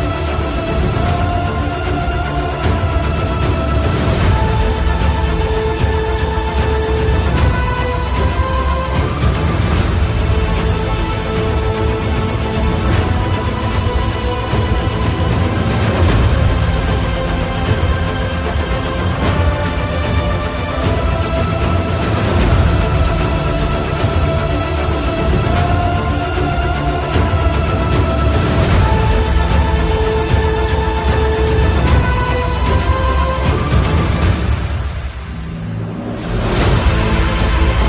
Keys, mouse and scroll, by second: 4.2 click, 4.3 click, 8.7-12.5 alt+shift+drag, 12.9 click, 15.0-19.4 alt+drag, 19.4-32.9 drag, 35.3 typing, 35.8 click.